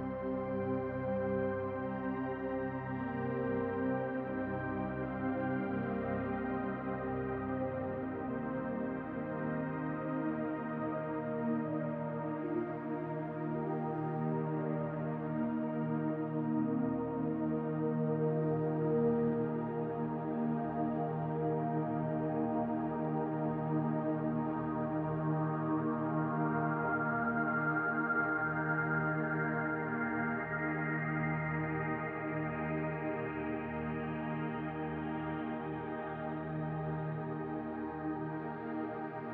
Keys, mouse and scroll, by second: 0.2 click, 5.1-6.2 drag, 6.2-7.5 scroll down 2, 9.4-13.2 drag, 15.6 click, 16.6 click, 17.3 click, 19.2 s, 20.6 g, 22.9 click, 23.6 scroll up 2, 24.8 drag, 25.2 s, 25.8 Tab, 26.4 s, 27.2 Tab, 28.0-28.8 scroll down 2, 28.8 click, 32.8 click, 35.8 shift+a.